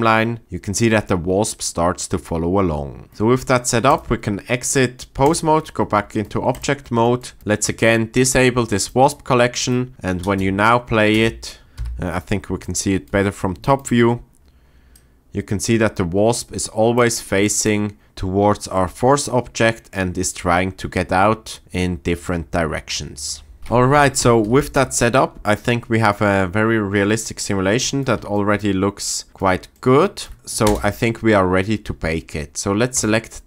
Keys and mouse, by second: 3.9-5.3 drag, 6.6 drag, 10.4 space, 11.2 space, 11.7 KP_7, 24.0 shift+Left, 24.7 space, 30.6 space.